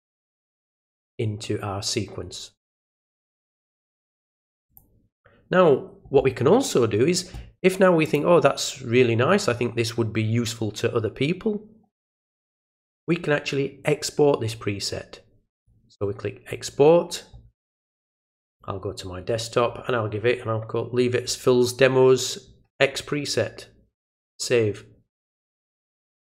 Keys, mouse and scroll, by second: 3.2 right click, 4.7 click, 8.0 click, 15.6 click, 18.5 click, 23.9 click.